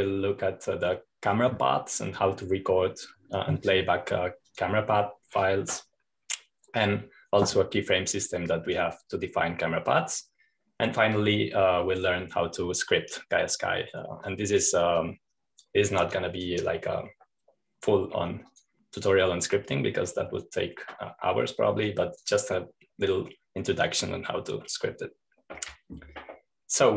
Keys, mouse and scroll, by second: 0.0-1.3 drag, 5.7-7.8 drag, 8.7-10.0 drag, 10.0-10.7 scroll down 1, 10.7 click, 12.3-14.1 drag, 15.5-24.3 drag, 26.8-26.9 scroll down 2.